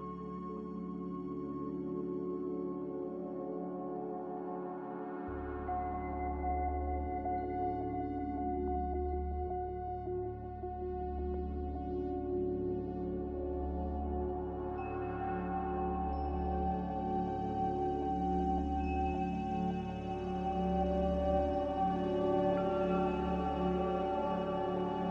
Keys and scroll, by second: 3.6 ctrl+w.